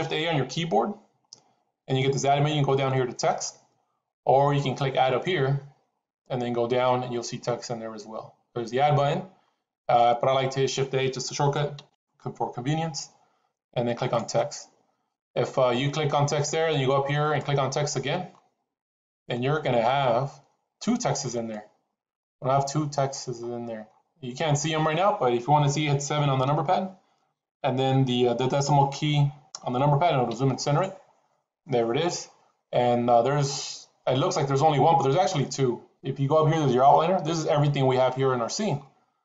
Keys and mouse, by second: 5.1-10.0 drag, 11.7 shift+a, 17.1-18.5 drag, 19.1-21.5 drag, 22.1-22.7 middle drag, 24.5-24.9 middle drag, 26.3 KP_7, 30.2 KP_Decimal.